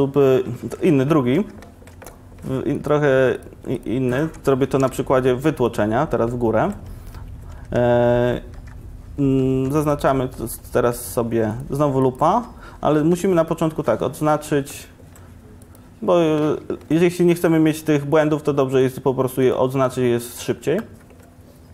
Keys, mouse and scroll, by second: 2.8-4.9 middle drag, 4.9 e, 5.9 click, 7.1 Tab, 7.6 Tab, 9.6 2, 10.7 ctrl+Tab, 13.0 2.